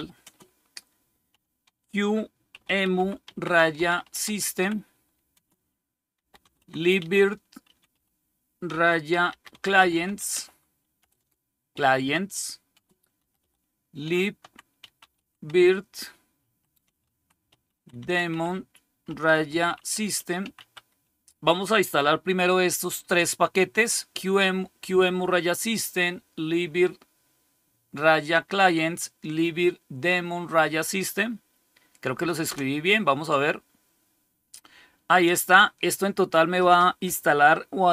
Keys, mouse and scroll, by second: 0.0-21.0 typing, 32.3 Return.